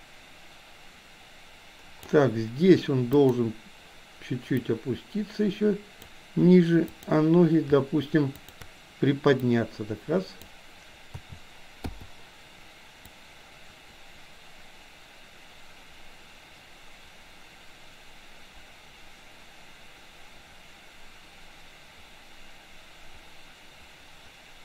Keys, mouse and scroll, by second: 3.2 click, 4.6 click, 5.0-6.1 drag, 7.0 click, 8.4 shift+click, 9.4-10.5 drag, 11.1 a, 11.9 i, 13.1-24.6 drag.